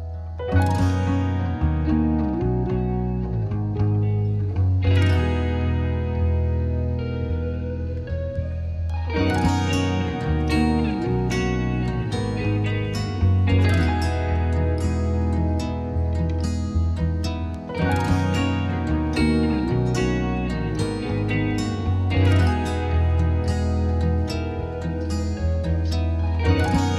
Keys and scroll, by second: 18.3 6.